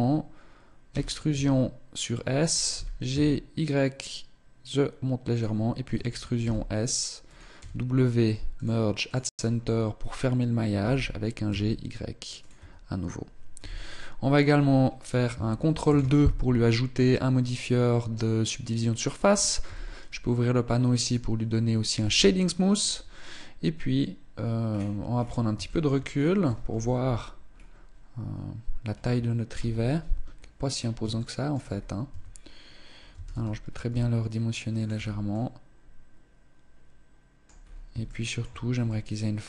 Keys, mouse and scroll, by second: 0.6 e, 2.5 g, 5.2 click, 5.6 e, 7.3 w, 9.2 scroll up 1, 10.4 g, 12.2 Tab, 13.2 z, 13.6-15.0 scroll down 1, 15.0 scroll down 2, 15.5 ctrl+2, 16.6 middle click, 19.3 t, 20.7 click, 21.6 t, 24.3-25.2 scroll down 10, 25.3 shift+middle click, 25.8-26.4 scroll down 2, 26.4 KP_0, 27.2-27.6 scroll up 2, 29.2 KP_1, 30.0-30.6 scroll up 5, 30.6 shift+middle click, 31.4-31.8 scroll up 1, 31.8 Tab, 32.8 a, 33.0 a, 33.6 s, 34.6 Tab, 35.0 middle click, 37.3-37.7 scroll up 3, 37.7 shift+middle click, 38.5 middle click.